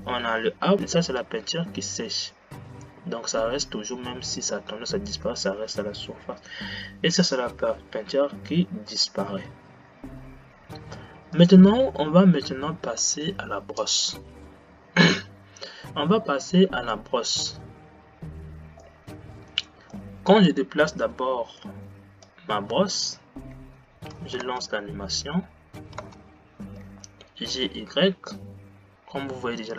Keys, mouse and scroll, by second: 19.0-23.8 middle drag, 23.8 g, 26.1 space, 27.0 g.